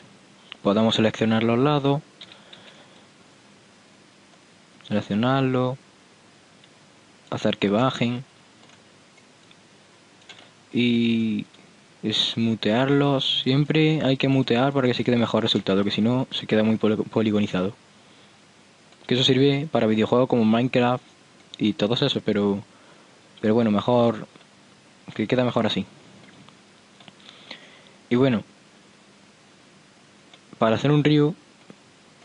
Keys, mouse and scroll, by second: 0.1 Tab, 2.4 a, 2.7 c, 8.3-9.6 middle drag, 9.6-11.3 drag, 9.8 middle click, 9.8 right click, 13.1 click, 17.3-23.7 middle drag, 24.8-28.1 middle drag, 31.3 Tab.